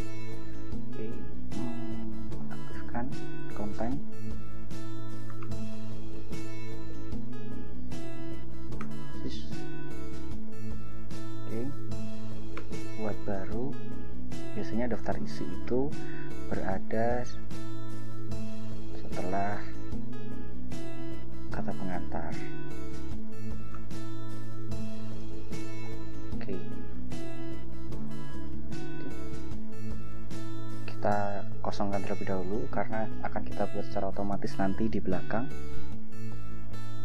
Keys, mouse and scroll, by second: 1.6-2.7 drag, 3.3 click, 4.3 click, 5.6 Return, 6.3 Return, 7.0 ctrl+r, 7.5-9.0 typing, 9.2 ctrl+shift+Caps_Lock, 10.0-11.6 typing, 11.9 Return, 12.7 ctrl+Return, 17.3 shift+Caps_Lock, 19.4 Caps_Lock, 21.8-23.3 typing, 24.0 ctrl+BackSpace, 24.3-25.8 typing, 28.1 click, 30.1 Return, 30.9 Return.